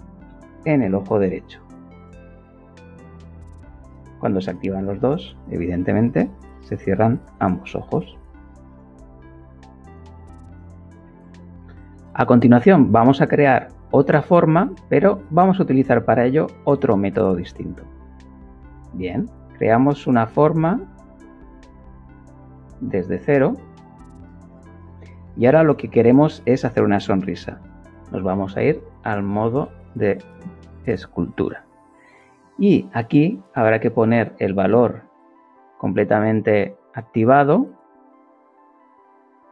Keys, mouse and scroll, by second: 0.2 r, 1.6 click, 2.6 KP_1, 2.7 Return, 5.9 click, 7.4 click, 8.4 click, 21.9 ctrl+shift+click, 23.4 ctrl+shift+click, 27.7 Tab, 28.1 click, 34.6-35.8 drag.